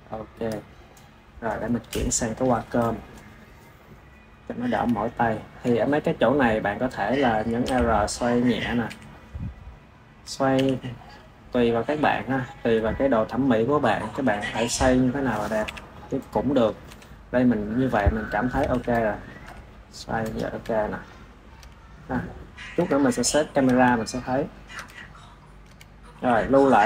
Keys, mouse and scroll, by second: 5.1-5.6 shift+middle drag, 5.6 click, 6.0 click, 6.5-7.5 drag, 7.5 r, 8.5 drag, 8.7 r, 10.4 g, 14.2 click, 14.5 g, 15.5 KP_7, 16.1 click, 16.5 click, 16.7 KP_1, 17.9-18.6 middle drag, 18.6 KP_1, 19.0 drag, 19.3 r, 20.3-20.6 drag, 20.6-26.0 middle drag, 26.0 s, 26.7 ctrl+s.